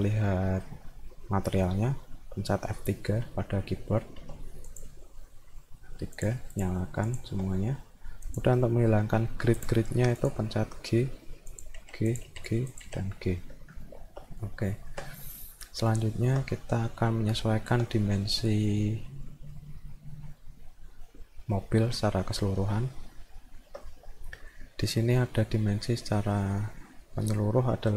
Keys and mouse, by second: 4.7 click, 6.2 click, 6.6 click, 7.1 click, 8.2 click, 9.6 click, 10.2 click, 11.5 click, 12.1 click, 12.7 click, 13.9 alt+middle click, 14.3 middle click, 14.7 alt+middle click, 15.9 alt+middle click, 16.6 middle click, 17.2 alt+middle click, 22.7 alt+middle click, 24.3 middle click.